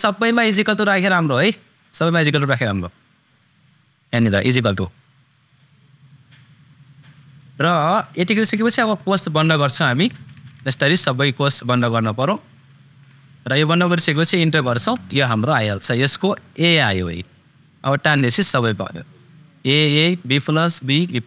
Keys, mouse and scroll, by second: 0.9 super+click, 4.3 super+click, 7.3 super+click, 10.0 shift+super+0, 12.7 shift+super+0, 14.6 super+Return, 16.6 click.